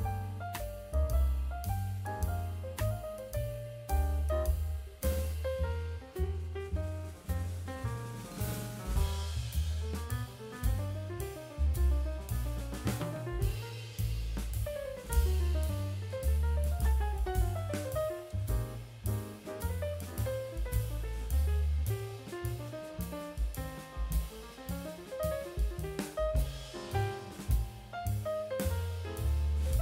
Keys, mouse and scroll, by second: 9.2-9.9 middle drag, 10.4-11.0 shift+middle drag, 13.2 g, 16.6 g, 21.1 g, 25.2 middle click, 25.8 scroll up 2, 26.2 scroll down 2, 27.9 alt+h, 29.0-29.4 middle drag.